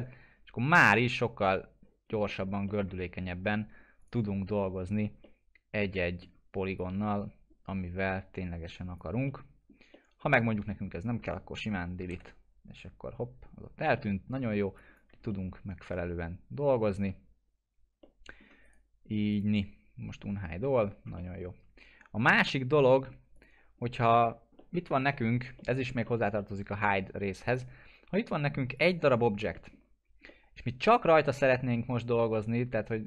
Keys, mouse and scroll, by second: 0.0 middle click, 0.0-2.3 middle drag, 3.1 scroll up 1, 4.0 click, 4.3 scroll down 1, 5.2-6.8 middle drag, 6.8-9.9 drag, 9.3 middle click, 9.9-10.8 alt+middle drag, 13.4-13.9 scroll up 1, 13.9-14.6 middle click, 14.8 click, 15.3-16.9 alt+middle drag, 18.0-18.6 alt+middle click, 18.6 right click, 19.3 click, 19.3 click, 20.2-20.6 scroll down 1, 20.6 middle click, 21.1-23.6 alt+middle drag, 23.3 click, 23.8 scroll up 1, 24.2-24.6 scroll down 1, 24.6 middle click, 25.1 alt+middle click, 27.4 click, 29.5 middle click, 29.8 scroll down 1, 30.3-33.0 alt+middle drag.